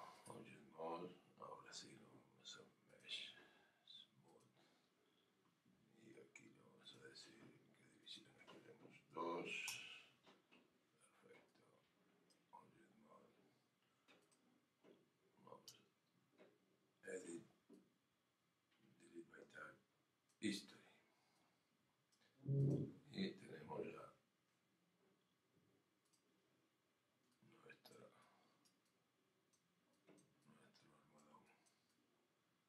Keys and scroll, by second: 9.7 Return.